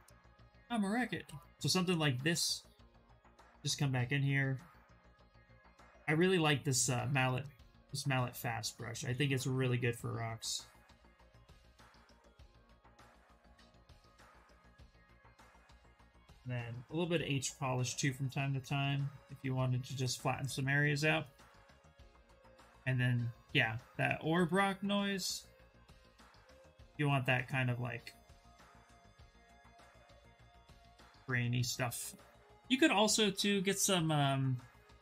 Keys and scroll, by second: 0.5 s, 16.3 b, 16.8 p, 17.6 s, 21.8 b, 22.1 o.